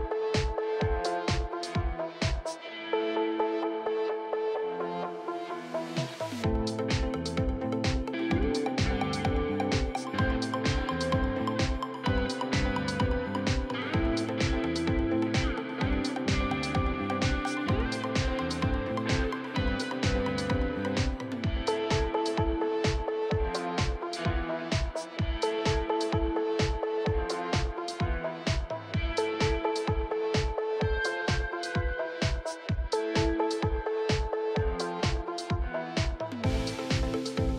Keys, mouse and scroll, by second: 0.2 i, 2.3 scroll up 3, 2.3 shift+middle click, 3.0-7.5 drag, 7.5 KP_3, 7.8 scroll up 3, 8.0 shift+middle click, 8.8 click, 9.3 s, 11.8-12.9 drag, 13.7-16.2 drag, 16.3-18.6 drag, 18.6 s, 19.8 click, 21.1 click, 21.4 s, 22.8-24.6 drag, 25.7 e, 26.9 r, 28.7 click, 30.0-32.3 drag, 32.3 middle click, 32.6 click, 33.1 KP_3, 34.4-35.8 drag, 35.8 scroll down 3, 36.0 middle click, 36.6 alt+click, 36.8 middle click.